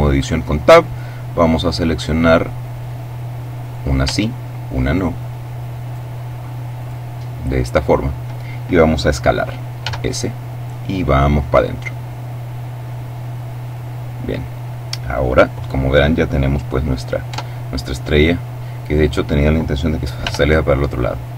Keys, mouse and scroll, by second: 2.1 right click, 3.5 right click, 4.7 shift+right click, 5.7 right click, 6.6 right click, 7.6 right click, 9.7 s, 13.5 click, 17.2 Tab, 20.1 r.